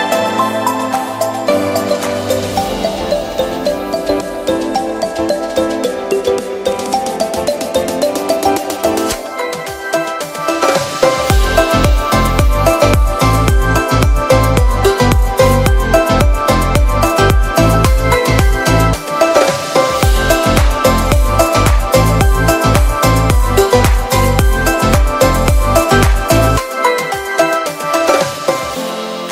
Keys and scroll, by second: 8.5 v, 9.4 shift+v, 10.1 super+z, 22.1 z, 23.9 b.